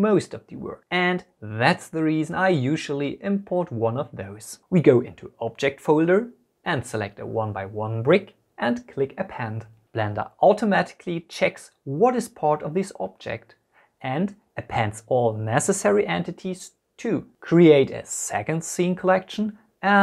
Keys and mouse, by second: 17.7 click, 18.1 shift+click, 18.6 p, 19.2 click, 19.6 Return, 19.8 F2.